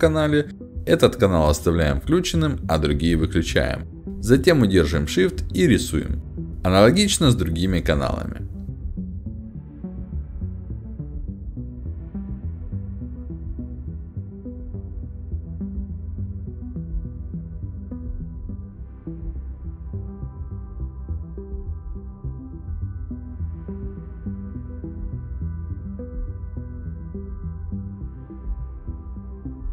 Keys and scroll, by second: 0.4 w, 7.5 shift+d, 10.0 w, 12.4 a, 12.6 s, 13.3 w, 13.5 d, 18.8 shift+d, 18.9 s, 22.0 w, 22.2 a, 23.4 d.